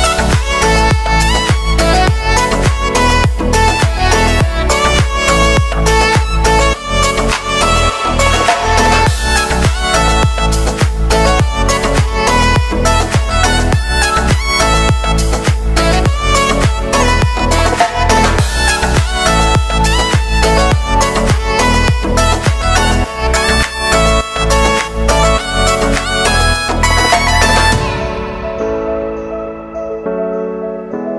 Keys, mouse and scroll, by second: 2.0 space, 4.1 click, 4.6 ctrl+d, 5.2-9.0 drag, 9.0 space, 11.0 click, 11.4 space, 15.3-18.3 drag, 18.8 ctrl+d, 19.9-23.2 drag, 24.6 space, 29.0 click, 29.3 ctrl+a, 29.8-31.1 typing.